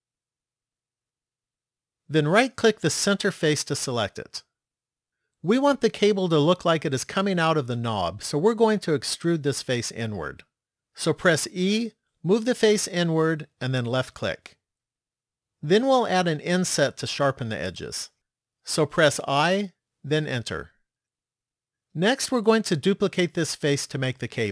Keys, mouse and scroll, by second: 2.5 right click, 11.6 e, 19.2 i.